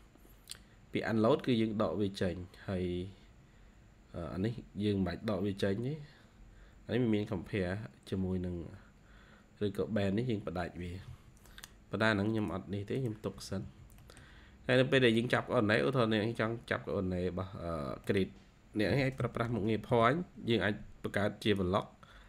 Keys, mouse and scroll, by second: 10.7 Escape, 11.0 Escape, 11.3 scroll down 2, 11.5-11.8 scroll up 2, 12.3-12.9 scroll up 2, 13.2 Escape, 13.5 Escape, 13.7 scroll down 1, 13.9 middle click, 14.6-15.1 scroll up 2, 15.1 middle click, 15.7-16.3 scroll up 2, 16.3-16.8 scroll down 2, 16.8-17.2 scroll up 2, 17.6 scroll up 5, 18.9-20.3 typing.